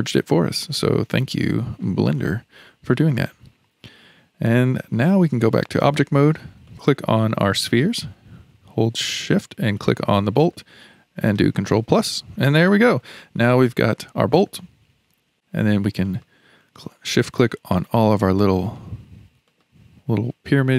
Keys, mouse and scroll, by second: 0.0-0.3 scroll down 1, 0.3 shift+middle click, 1.0-1.4 scroll down 4, 1.4-5.2 shift+middle drag, 5.2 Tab, 6.7 click, 7.6 click, 9.8 shift+click, 11.8 ctrl+KP_Add, 12.7 click, 16.0 click, 17.1 shift+click, 17.8 shift+click, 18.6 shift+click, 19.5 shift+click, 20.5 shift+click.